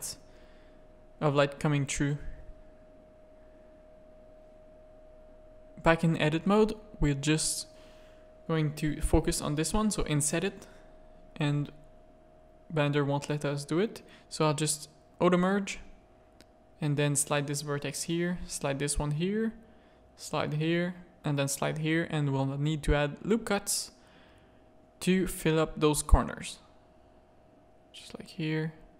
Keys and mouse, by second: 1.4 middle click, 2.2 z, 2.7 click, 3.5 Tab, 3.6 click, 4.0 z, 4.3 a, 4.7 shift+click, 7.6 click, 11.5 middle click, 14.2 click, 16.6 g, 17.7 click, 17.9 g, 18.8 a, 19.6 click, 19.8 g, 20.7 click, 20.9 g, 21.8 a, 22.2 z, 22.7 ctrl+r, 26.1 ctrl+r.